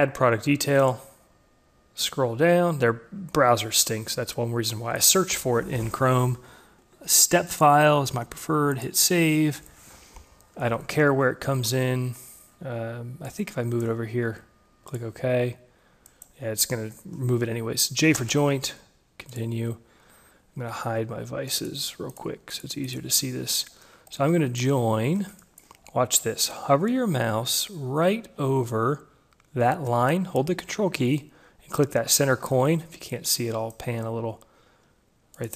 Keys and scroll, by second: 18.3 j.